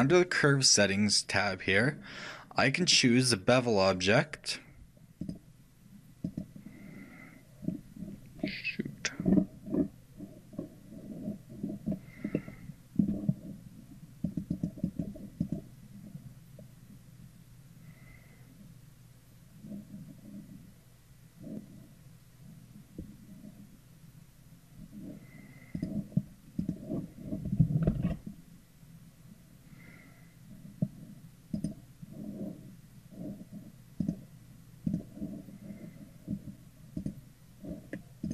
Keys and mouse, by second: 3.1-4.9 drag, 7.4-14.5 middle drag, 14.5-17.6 drag, 26.1-28.7 drag, 28.2 shift+a, 34.3-37.1 drag, 37.3-38.3 drag.